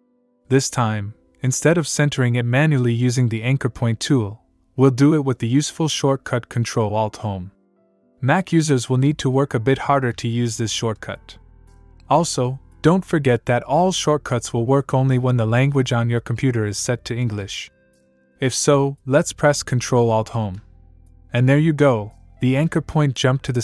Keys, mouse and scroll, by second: 20.1 ctrl+alt+Home.